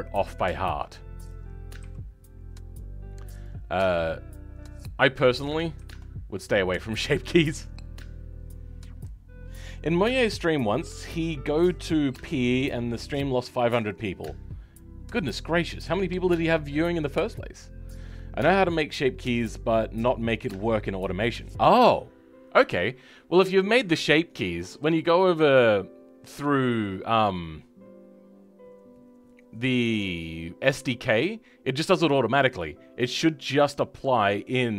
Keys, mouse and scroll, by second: 1.2 click, 1.7 g, 5.7 ctrl+z, 23.3-24.0 scroll down 10, 24.7-34.7 scroll down 7.